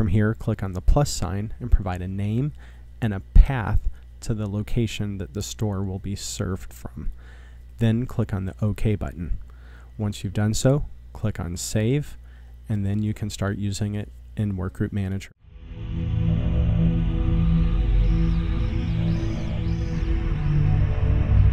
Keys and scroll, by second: 0.5-4.6 typing, 5.7-7.1 typing.